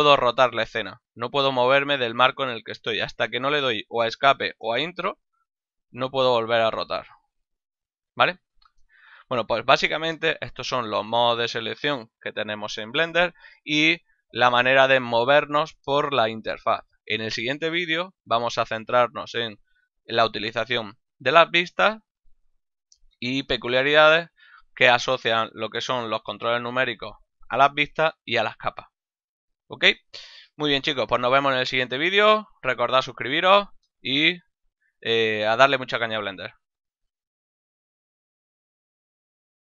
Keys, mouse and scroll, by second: 0.2 middle click, 4.6 Return, 4.6 KP_Enter, 5.5 middle click, 8.0 middle click, 8.8 middle click, 14.3 middle click, 18.9 middle click, 29.5 middle click, 29.9 middle click.